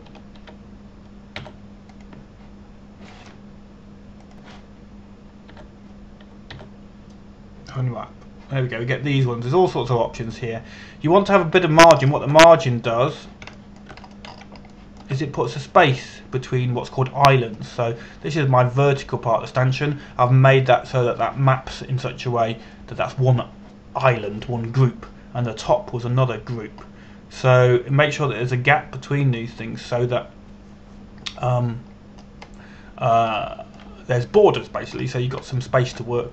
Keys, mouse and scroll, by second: 1.0-1.7 scroll down 1, 1.7 a, 2.0 a, 3.0 u, 3.5 click, 7.2 u, 8.1 u, 13.6 scroll up 1, 14.7 click, 15.2 shift+middle click, 15.7-16.1 scroll up 1, 16.4 shift+middle click, 18.9-22.3 scroll down 1, 22.3-23.3 scroll up 1, 28.5-31.0 scroll up 1, 31.0-33.6 scroll down 1, 35.0 shift+middle click.